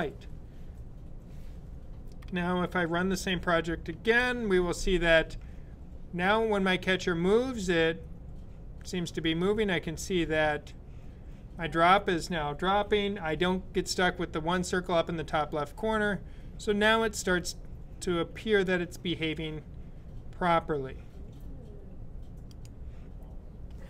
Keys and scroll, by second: 3.7 super+b.